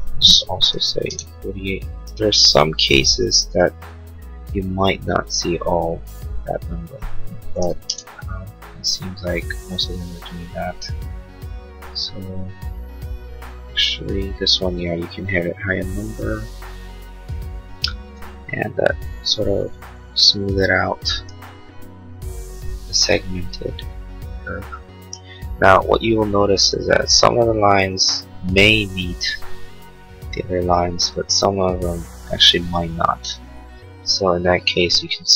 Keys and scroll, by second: 0.7 8, 7.6 8, 8.0 Return.